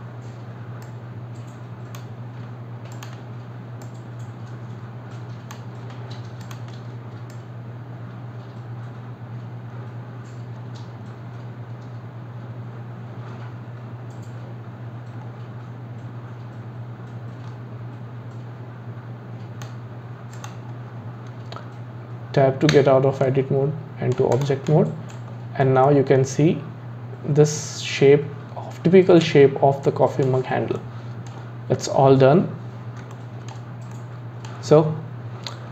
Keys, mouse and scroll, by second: 0.8 click, 2.9 alt+click, 3.8 click, 6.4 alt+click, 7.3 click, 20.3 click, 22.7 Tab, 23.2-24.3 middle drag, 24.3 click, 24.7-25.3 middle drag, 25.3-25.9 scroll down 5, 25.9-28.9 middle drag, 30.8-32.3 middle drag, 32.3-33.1 scroll up 3, 33.1-35.7 shift+middle drag.